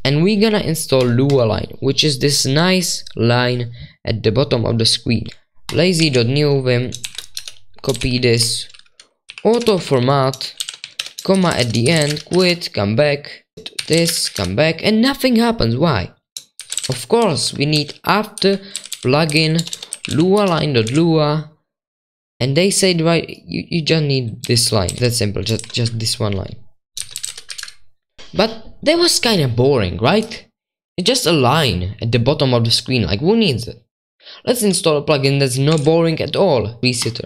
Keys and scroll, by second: 0.0-0.2 typing, 6.0 super+2, 7.0 ctrl+v, 7.3 Escape, 7.7-14.3 typing, 16.3-21.3 typing, 18.4 Right, 18.7 ctrl+w, 18.9 ctrl+w, 24.9 ctrl+c, 24.9 ctrl+t, 25.0 ctrl+w, 25.0 super+2, 25.6 ctrl+v, 26.7-28.7 typing, 35.8 super+1.